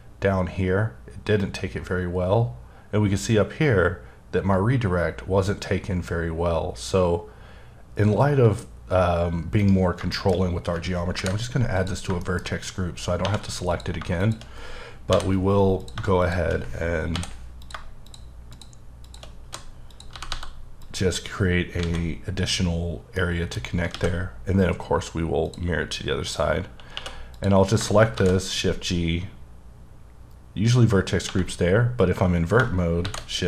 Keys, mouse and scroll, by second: 9.6 right click, 10.1 shift+middle click, 11.2 ctrl+g, 11.7 click, 12.2 shift+middle click, 12.4-13.2 shift+scroll up 4, 13.2 1, 13.7 click, 15.1 j, 15.8 click, 17.1 j, 17.6 click, 19.0 shift+click, 19.5 f, 19.9 click, 20.3 g, 20.8 click, 21.1-21.8 scroll down 5, 21.8 alt+a, 23.2 middle click, 23.6-23.9 scroll down 2, 23.9 alt+x, 25.4 click, 25.8-26.9 scroll up 4, 26.9 2, 27.3 click, 28.2 shift+g, 31.2 1, 31.7-32.6 scroll up 1, 32.6-33.0 shift+scroll up 1, 33.0 shift+g.